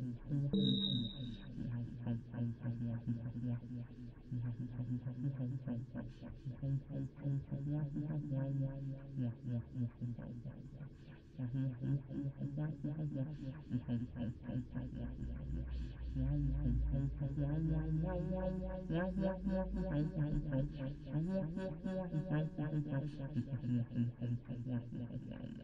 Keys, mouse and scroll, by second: 0.4 middle click, 1.0-3.4 drag, 3.7-4.7 middle drag, 4.0 click, 5.6 click, 7.1 middle click, 7.5 middle click, 9.4 click, 9.5-11.2 middle drag, 13.5-15.8 middle drag, 18.0 middle click, 18.5 middle click, 18.7 middle click, 19.0 middle click, 20.8-22.5 drag, 23.2 ctrl+z, 23.5 middle click, 24.9 middle click.